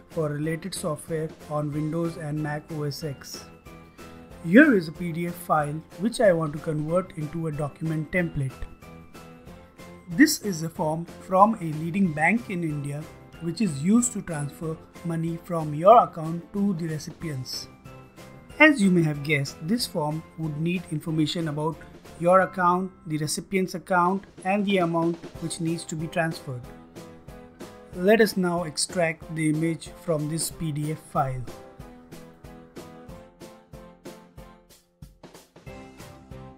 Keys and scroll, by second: 30.2-36.5 typing.